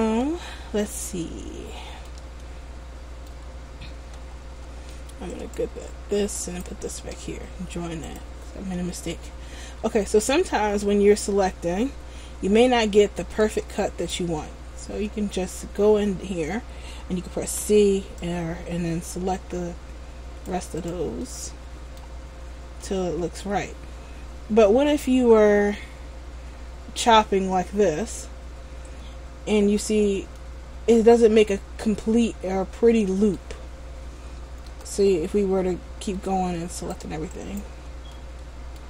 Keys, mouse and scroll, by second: 2.6 middle click, 4.9 Tab, 5.5 right click, 6.5 shift+right click, 8.2 click, 9.0 Tab, 10.4 middle click, 13.9 alt+right click, 15.2 middle click, 17.6 c, 18.5 c, 21.0 right click, 21.4 middle click, 22.4 scroll down 2, 23.0 middle click, 30.5 middle click, 34.8 a, 36.9 shift+right click, 37.5 alt+right click, 38.3 middle click.